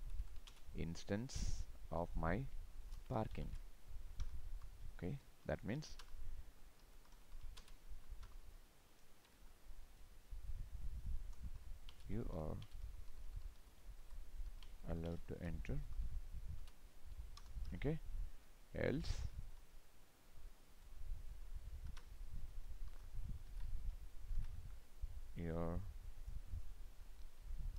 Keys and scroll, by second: 0.5 ctrl+space, 7.6 ctrl+space, 23.5 ctrl+c, 24.3 ctrl+v, 27.3 ctrl+Left.